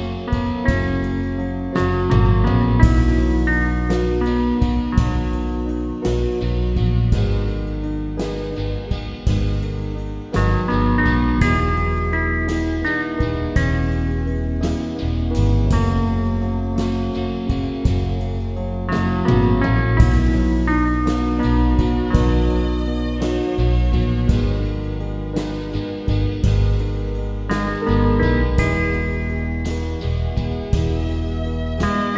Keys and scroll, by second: 26.2 Return.